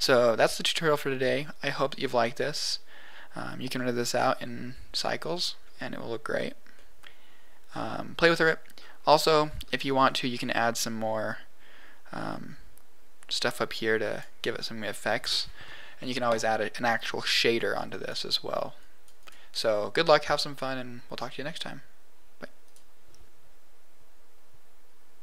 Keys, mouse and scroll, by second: 1.6-2.0 scroll down 3, 2.0-5.2 middle drag, 5.6 scroll up 1, 6.7-7.8 middle drag, 8.7-9.2 scroll down 6, 9.2 middle click, 10.0-12.1 scroll up 7, 12.1 click, 17.5-19.0 drag, 19.1 click, 20.1 scroll down 1.